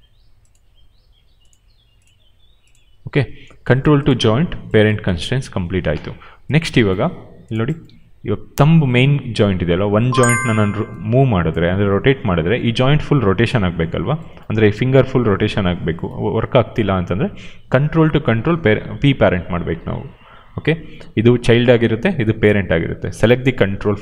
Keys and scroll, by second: 7.8 e, 11.7 ctrl+z, 12.2 q.